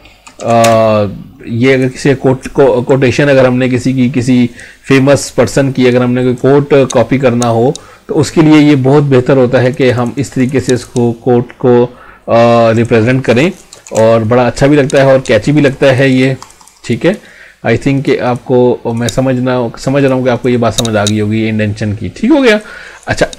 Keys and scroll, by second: 0.6 space.